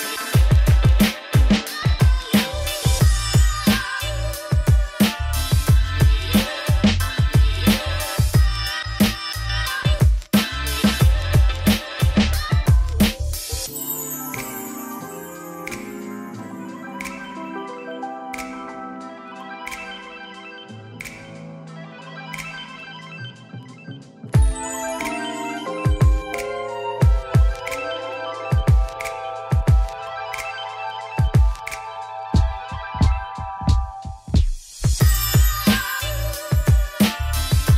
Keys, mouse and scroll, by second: 5.5 shift+middle click, 6.4-8.9 drag, 8.9-10.5 middle drag, 10.5 u, 12.6-14.7 drag, 15.5-18.2 middle drag, 18.2 click, 20.5 2, 21.6-24.8 middle drag, 25.5 u, 25.7-26.9 shift+middle drag, 26.9-27.9 drag, 27.9 a, 29.2 scroll down 3, 29.4 shift+middle click, 29.7 Tab, 30.6-31.7 middle drag, 31.7 scroll up 4, 31.9 shift+middle click, 32.6 click, 33.5 middle click, 33.8-34.6 scroll down 2, 34.6-35.3 scroll down 1, 35.3 click, 35.6 Tab, 35.7 a.